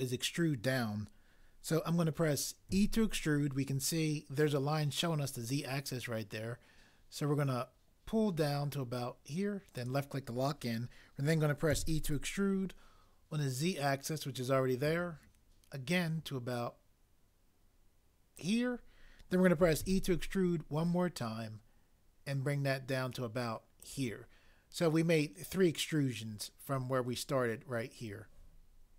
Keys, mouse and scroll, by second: 2.7 e, 11.7 e, 19.8 e.